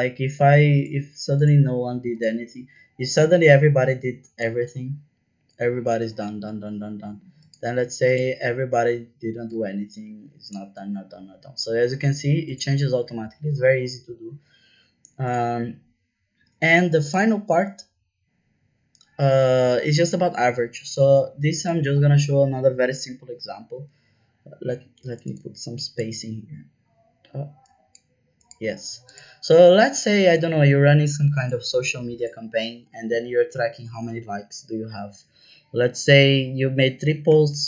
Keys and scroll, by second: 37.2 KP_5, 37.3 KP_0.